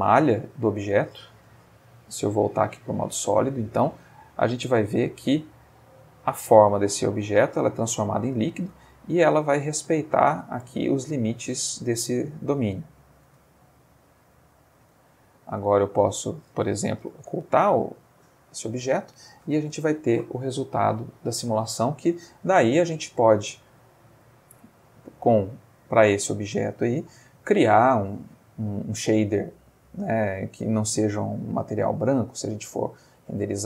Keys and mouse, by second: 1.6 z, 2.8 click, 4.3-13.2 drag, 13.3 space, 15.8 click, 17.1 h, 22.8 Escape, 24.3-25.8 drag, 26.3 click, 28.8 click, 32.8 click.